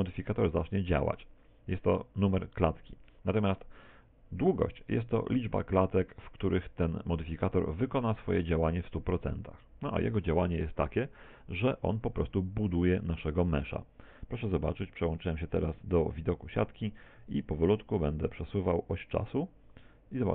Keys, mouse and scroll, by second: 14.8 z, 18.2 click.